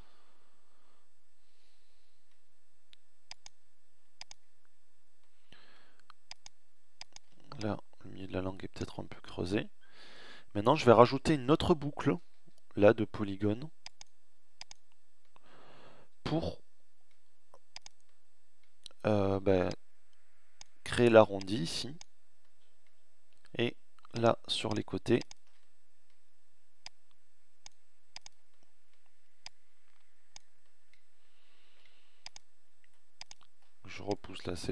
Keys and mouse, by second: 6.6-7.8 middle drag, 7.8 right click, 11.1 ctrl+r, 21.3 middle click, 31.2-33.9 middle drag, 33.9 right click.